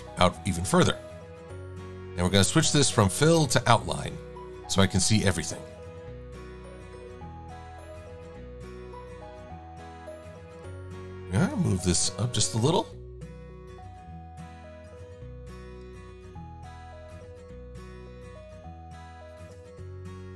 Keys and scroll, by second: 5.7 shift+c, 15.8 shift+c, 19.1 a, 20.0 Right.